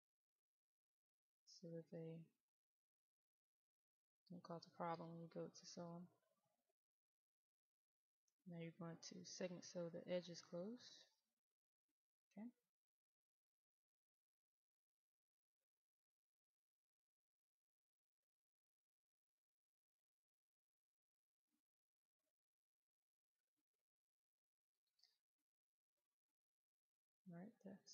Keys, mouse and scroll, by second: 1.5 click, 1.5 q, 5.4 click, 20.5 middle click, 22.9 click, 23.4 q, 23.9 q, 25.9 click, 27.3-27.7 scroll up 1.